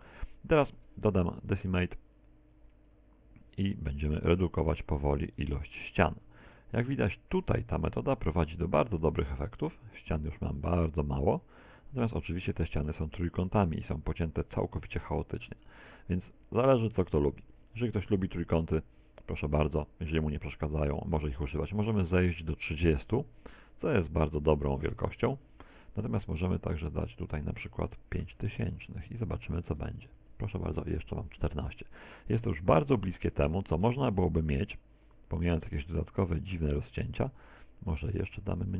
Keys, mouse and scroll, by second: 0.7 z, 1.3 middle click, 3.4 click, 3.5 z, 3.7 Tab, 3.9-6.7 scroll up 3, 6.7-7.1 scroll down 3, 7.1 z, 8.1 z, 8.3 Tab, 8.5 click, 12.2 click, 19.4 z, 19.7 middle click, 21.2 click, 26.9 click, 28.5 click, 31.0 middle click, 31.0 z, 33.0 z, 35.0 click.